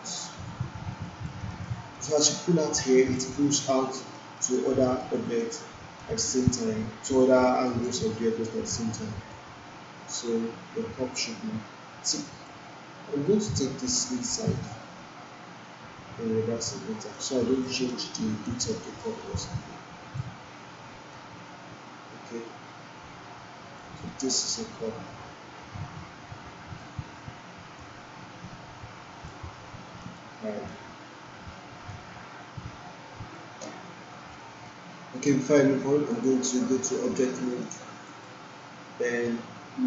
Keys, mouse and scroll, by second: 0.9-1.8 alt+click, 1.5 alt+middle click, 2.0 alt+click, 2.9 alt+click, 3.2-3.9 alt+right click, 4.1 alt+middle click, 5.1 alt+right click, 5.4-6.1 alt+click, 6.2 alt+middle click, 6.5-7.6 alt+click, 7.4 alt+middle click, 7.8 alt+click, 9.2-12.7 drag, 13.2 ctrl+z, 14.6-17.1 drag, 17.6 alt+right click, 18.2-18.6 alt+click, 18.6 alt+middle click, 19.5-20.1 alt+click, 21.4-23.9 drag, 24.3-26.9 alt+drag, 27.7-29.3 drag, 30.1-30.7 alt+drag, 31.9-33.4 drag, 34.4 alt+middle click, 36.1 click, 36.5-37.7 right drag, 38.1 click.